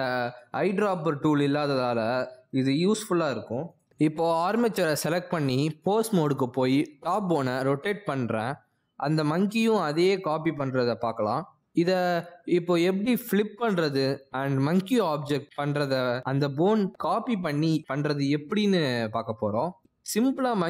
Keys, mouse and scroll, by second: 3.1 click, 7.9 click, 9.6 ctrl+Tab, 10.6 r, 13.1 r.